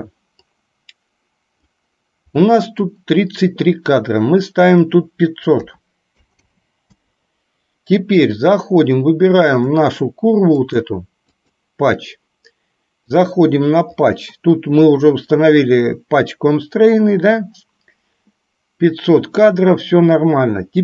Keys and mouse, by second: 0.7-1.9 drag, 2.5 middle click, 4.7-7.2 drag, 6.4 KP_0, 9.7 click, 10.7 click, 11.4 click.